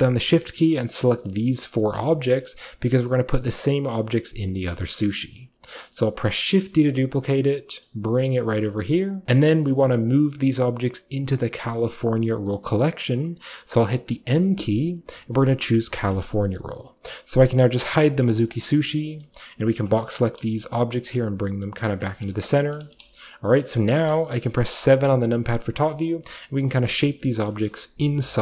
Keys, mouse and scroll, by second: 2.0 shift+scroll down 2, 2.2-4.0 shift+middle drag, 4.2-4.8 middle drag, 4.9-6.5 shift+scroll up 2, 5.0-7.7 shift+middle drag, 6.5-7.7 shift+scroll up 1, 7.9-9.1 middle drag, 9.1 click, 9.2-9.7 shift+middle drag, 9.2-11.9 shift+scroll up 2, 9.9-12.7 shift+middle drag, 11.9-12.7 shift+scroll up 1, 12.9-16.0 middle drag, 16.0 click, 18.4 click, 19.0 shift+scroll down 2, 19.7 shift+drag, 20.5 shift+scroll down 1, 20.6-21.0 shift+scroll up 2, 21.0 typing, 22.0 click, 22.5-25.0 shift+scroll up 2, 23.0 typing, 23.3 shift+middle drag, 23.7-25.8 shift+middle drag, 25.0 KP_7, 25.9-27.6 shift+scroll up 1, 26.0-27.6 shift+middle drag, 27.7-28.4 middle drag, 28.3 KP_7.